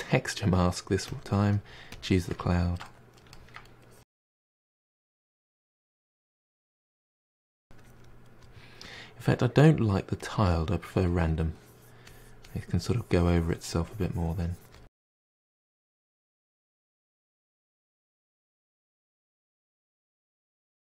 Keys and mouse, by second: 3.2-3.6 middle drag, 3.6-6.0 drag, 6.0-6.4 middle drag, 6.4-14.8 drag, 14.8 middle drag, 15.0 drag, 15.1 middle drag, 15.2-15.6 drag, 15.6-16.2 middle drag, 16.2 drag, 16.3 middle click, 16.4 click, 16.6 middle drag, 16.6 drag, 16.8 middle drag, 17.0 f, 17.1-17.4 drag, 17.4 middle drag, 17.6-18.1 drag, 18.1 middle drag, 18.4-18.8 drag, 18.8 middle click, 18.9 drag, 19.2 middle click, 19.3-20.0 drag, 20.0-20.9 middle drag.